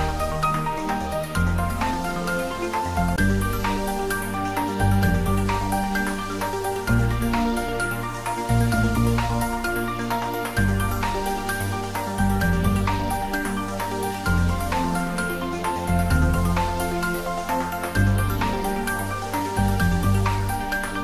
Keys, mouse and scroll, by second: 0.0 shift+d, 0.4 x, 4.1 click, 4.5-5.5 scroll down 1, 5.5 click, 6.3-7.1 scroll up 1, 8.6 click, 9.8-10.8 scroll up 1, 11.5 3, 12.4 scroll up 1, 13.4 shift+z, 14.0 scroll down 1, 15.1-16.2 typing, 17.7 y, 19.1 click, 19.9 g.